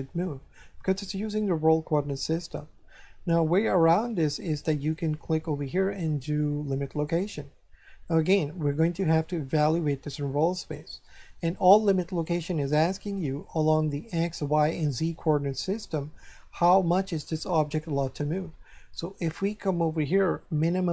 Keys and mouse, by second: 4.8 click, 6.9 click.